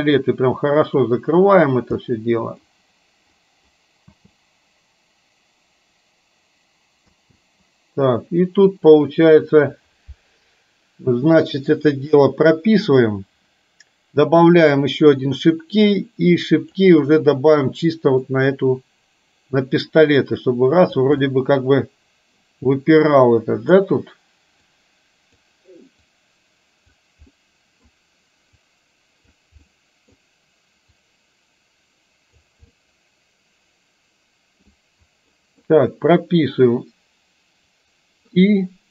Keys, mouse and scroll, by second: 0.7 click, 1.4 click, 2.1 middle click, 3.4 click, 4.2 space, 7.2 space, 12.9 click, 14.6 click, 16.1 click, 18.3-21.1 drag, 21.2-23.8 middle drag, 24.8 click, 26.1-27.1 drag, 27.3 middle click, 28.7 click, 29.7 middle click, 31.1-32.6 drag, 32.7-34.7 middle drag, 35.4 middle click, 37.8 click.